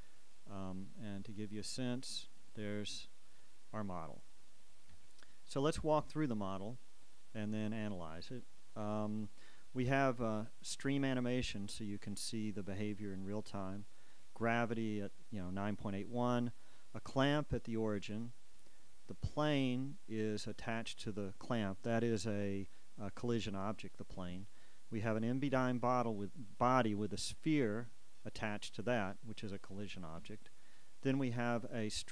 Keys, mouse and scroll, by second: 2.9-3.5 shift+scroll down 2, 3.5-9.7 shift+drag, 6.5 KP_1, 9.7-14.6 shift+middle drag, 14.6-16.6 shift+scroll up 2, 16.6-16.9 shift+scroll up 1, 16.9 shift+click, 19.4 Down, 24.5 Down, 30.4 Down.